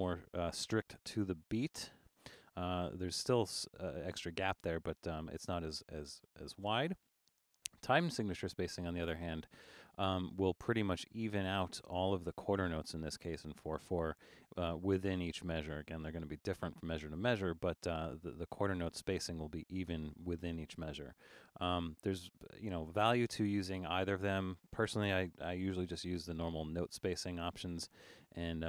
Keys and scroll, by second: 0.7 super+5, 6.5 super+a, 25.4 super+4.